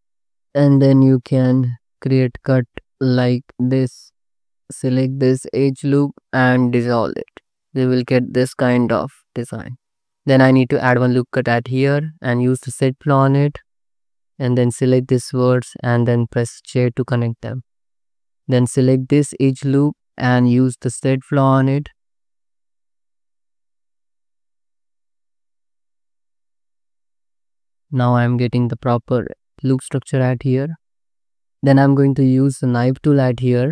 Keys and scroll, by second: 3.1 Tab, 3.9 space, 4.3 c, 4.4 2, 6.6 ctrl+x, 7.3 Tab, 8.3 alt+shift+z, 9.4 alt+shift+z, 10.0 ctrl+z, 10.4 ctrl+r, 11.6 2, 14.3 1, 16.7 j, 17.5 2, 23.5 Escape, 23.8 g, 24.3 Tab, 25.5 Tab, 25.7 ctrl+r, 26.0 ctrl+r, 27.2 ctrl+r, 28.1 ctrl+z.